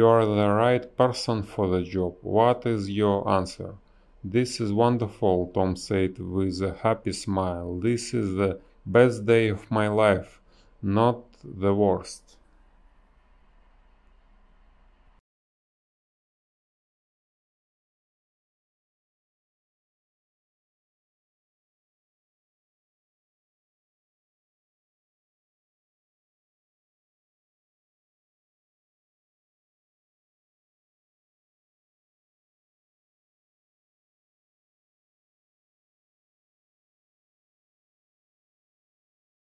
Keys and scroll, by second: 1.4 space, 2.2 space, 8.3 space, 9.9 space, 10.5 ctrl+z, 11.7 space, 14.4 ctrl+z, 14.6 space, 17.5 ctrl+z, 17.9 ctrl+z, 18.1 ctrl+z, 18.3 space, 21.6 space, 23.0 ctrl+z, 24.2 ctrl+z, 24.9 a, 27.9 space, 28.4 b, 30.5 space, 30.9 ctrl+z, 34.4 space, 35.2 ctrl+z, 36.6 ctrl+z.